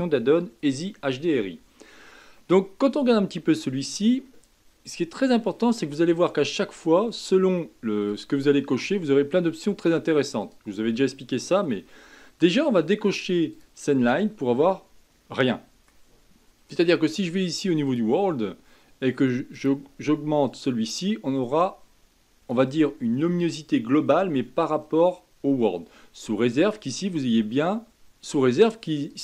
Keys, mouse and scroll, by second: 2.3-5.5 middle drag, 5.5-8.4 drag, 10.4-13.5 drag, 14.5-17.5 middle drag, 17.8 click, 19.5 click, 26.6-27.9 drag, 29.1-29.2 drag.